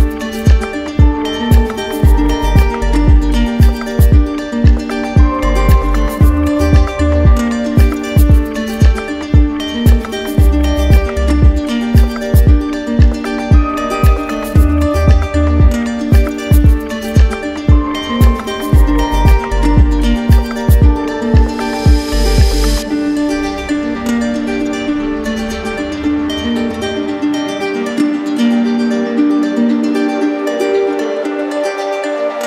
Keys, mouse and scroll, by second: 7.3-8.3 drag, 15.8-16.8 drag, 17.2-18.3 drag, 22.0-23.0 drag, 26.9 click, 27.1 ctrl+z, 28.7 click, 29.7 alt+click.